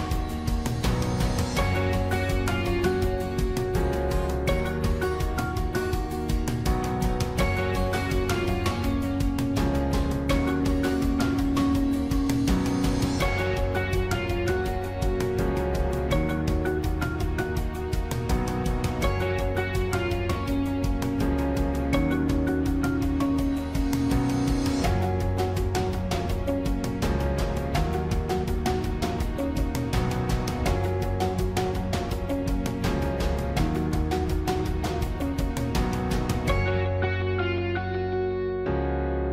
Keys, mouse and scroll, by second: 9.7 ctrl+-, 13.2 ctrl+-, 15.0 right click, 15.6 right click, 22.4 ctrl+-, 24.4 ctrl++, 26.7 ctrl++, 28.8 right click, 31.3 ctrl+-, 34.0 ctrl++, 35.1 ctrl+-.